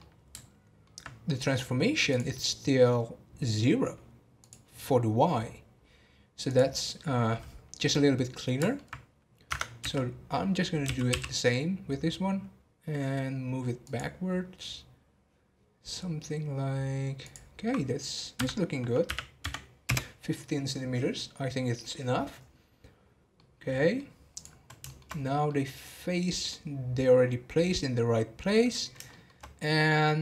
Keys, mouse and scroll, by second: 0.0-3.8 middle drag, 3.8-7.9 drag, 7.9-11.5 middle drag, 23.4-25.1 middle drag, 25.1 scroll up 3, 25.4-28.6 middle drag, 29.1-30.2 shift+middle drag.